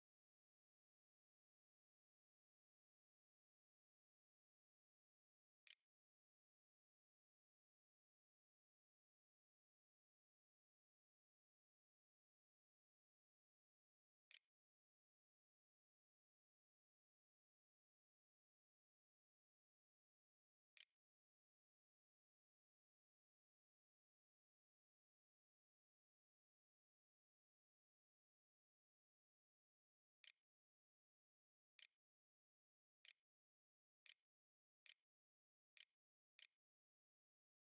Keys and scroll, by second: 13.1-14.0 typing, 15.2-16.2 typing, 19.3-21.6 typing, 29.3-31.6 typing, 33.6-36.4 typing.